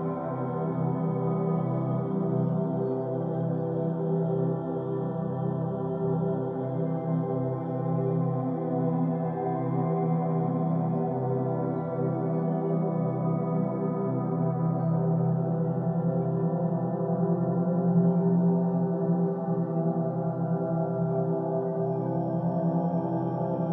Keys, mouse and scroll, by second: 0.1 shift+click, 0.4 shift+click, 0.6 middle click, 1.5 shift+click, 1.8 shift+click, 2.4 ctrl+z, 2.7 shift+click, 2.9 shift+click, 3.2 middle click, 3.4 g, 4.4-5.8 middle drag, 5.8 g, 6.6 middle click, 6.9 1, 7.3 click, 7.6 g, 9.4 Tab, 10.0-10.5 scroll down 8, 10.5-11.0 middle drag, 11.0-11.7 scroll down 4, 11.7 shift+middle click, 11.9-12.7 scroll up 5, 12.7-14.3 shift+middle drag, 14.3-14.7 scroll up 1, 14.7-15.9 middle drag, 15.9-16.5 scroll down 2, 16.1 shift+middle drag, 16.5-17.5 shift+middle drag, 17.5 click, 17.7 b, 19.4 o.